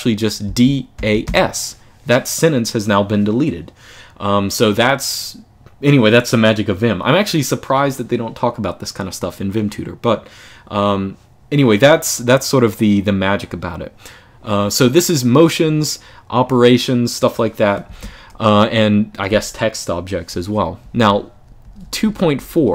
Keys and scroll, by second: 0.0-1.5 typing, 17.7 Escape, 20.0-22.7 typing.